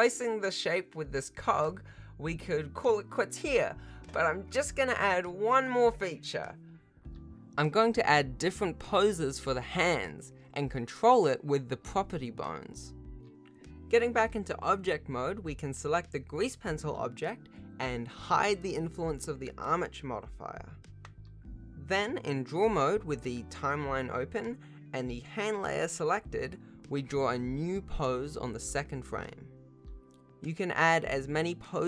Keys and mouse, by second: 0.0-0.2 typing, 0.2 ctrl+s, 0.2 shift+click, 0.4 ctrl+s, 0.4 ctrl+Tab, 0.6-5.2 alt+drag, 6.8 shift+middle click, 7.9 shift+middle click, 8.6 Tab, 13.9 ctrl+Tab, 15.7 g, 19.1 ctrl+Tab, 19.6-21.0 drag, 22.6 click, 23.2 ctrl+Tab, 23.9 g, 25.8 ctrl+Tab, 27.2 click, 27.7 click, 29.6 shift+click, 31.7-31.8 drag.